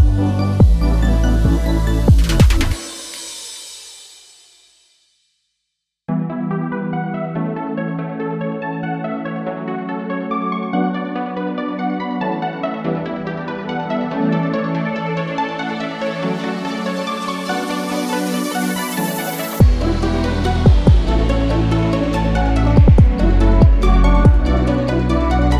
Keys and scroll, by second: 11.3-12.4 typing, 17.8 0, 18.7 shift+5, 19.1 shift+Return, 19.8 Return.